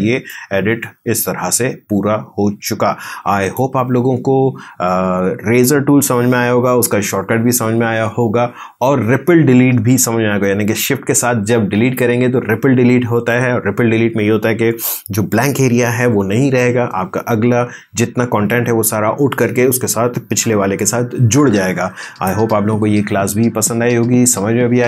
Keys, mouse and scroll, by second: 0.3-3.8 drag.